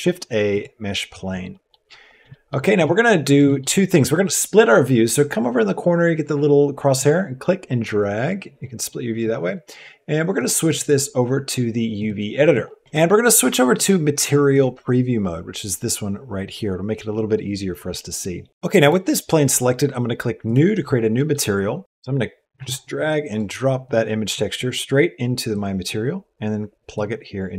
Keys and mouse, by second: 1.3 click, 2.1 shift+middle click, 2.5 middle click, 2.9 shift+middle click, 3.2 middle click, 6.8-8.5 drag, 8.6 click, 8.8 click, 10.2 click, 11.0 click, 13.7 middle click, 14.7 click, 18.6-21.0 drag, 21.0 middle click, 23.8 click, 24.4 middle click, 25.3-26.8 drag.